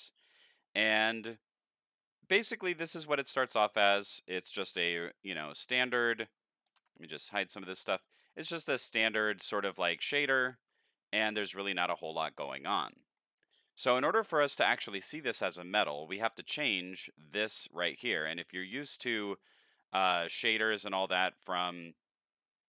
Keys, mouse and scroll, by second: 0.8 middle click, 1.2 middle click, 4.8 n, 6.8 t, 9.5-10.7 middle drag, 11.4-13.1 middle drag, 18.5 middle click, 19.1 scroll up 4, 19.5 middle click, 20.3-20.9 drag.